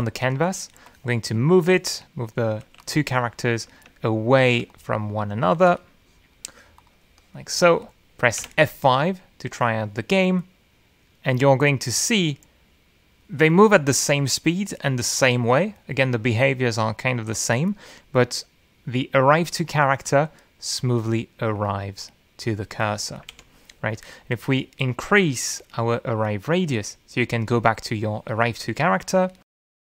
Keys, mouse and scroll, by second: 2.0 middle click, 2.8 w, 3.0 click, 4.3 click, 4.7 q, 4.9 click, 6.6 ctrl+z, 6.8 ctrl+click, 7.6 w, 7.8 click, 8.9 click, 9.3 click, 10.5 F5, 25.4 F8, 27.2 click, 29.6 click.